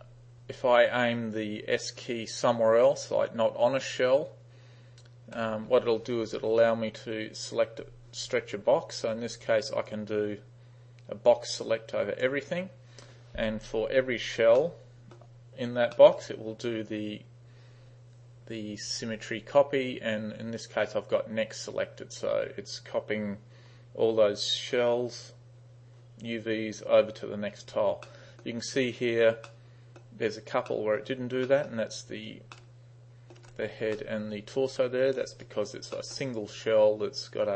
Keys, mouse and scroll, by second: 5.5 s, 9.9-12.3 drag, 14.7-15.2 middle drag, 16.0 middle click, 28.1-28.5 middle drag, 29.5-30.0 middle drag, 30.7 middle click, 31.5 middle drag, 32.1 space, 32.6-33.4 middle drag, 33.9 space, 34.0-35.2 middle drag, 35.5 right click, 36.0 middle click, 36.4 right click.